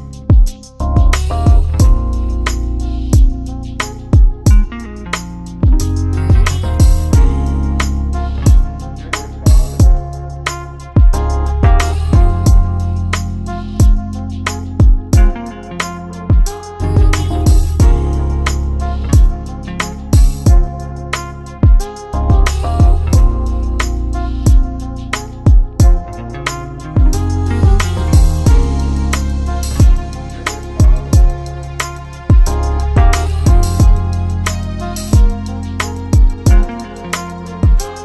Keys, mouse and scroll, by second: 0.0 click, 1.4 right click, 4.5 click, 8.7 click, 9.9 shift+click, 11.9 click, 12.3 shift+click, 17.7 click, 18.6 shift+click, 21.4 click, 22.0 shift+click, 25.8 click, 28.6 ctrl+shift+click, 31.4 click, 35.5 click.